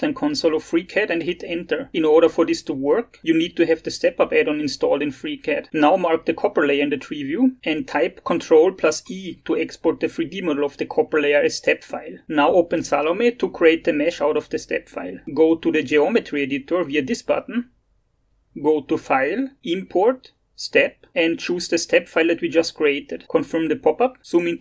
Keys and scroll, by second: 0.6 ctrl+v, 1.6 Return, 6.9 ctrl+e.